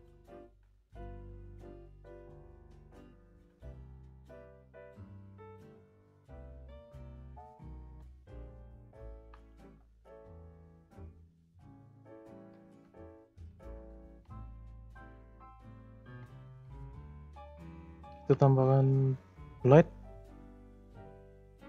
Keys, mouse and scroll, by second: 0.7 click, 1.0 e, 2.7 click, 3.2 e, 5.9 click, 7.0 p, 7.8 Tab, 8.1 click, 8.6-9.1 scroll up 1, 9.1 h, 9.3 click, 9.6 Tab, 10.0 click, 11.0 click, 11.9 shift+click, 12.2 shift+click, 13.3 f, 14.0 f, 14.7 Tab, 14.9 click, 15.3-15.9 middle drag, 15.9 scroll up 2, 16.3-16.6 shift+middle drag, 16.6-17.0 scroll up 5, 17.0-17.8 shift+middle drag, 17.8 scroll down 1, 18.0 shift+a.